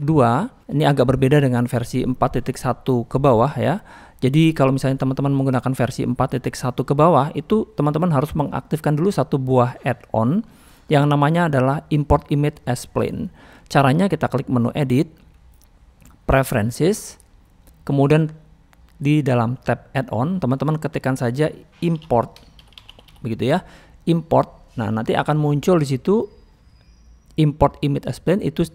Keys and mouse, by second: 7.9-28.7 drag.